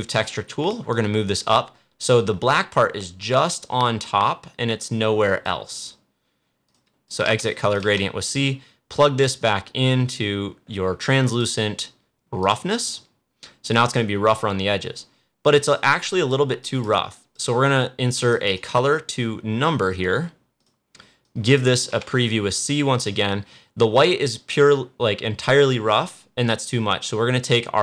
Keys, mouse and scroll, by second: 7.7 c, 9.3-12.3 drag, 15.3 click, 18.5 right click, 20.5 click, 21.8 c.